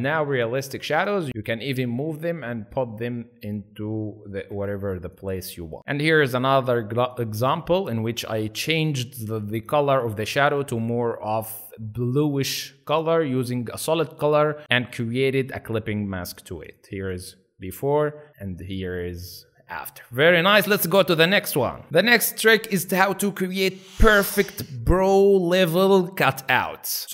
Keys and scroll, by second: 0.3 space, 1.3 ctrl+z, 4.5 space.